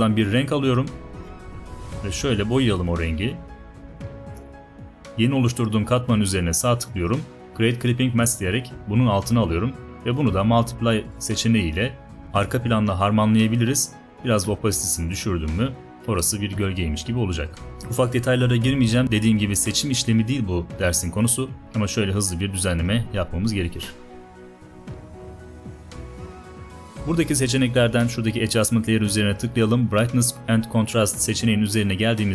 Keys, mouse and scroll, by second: 21.6 b, 21.7-22.8 alt+right drag.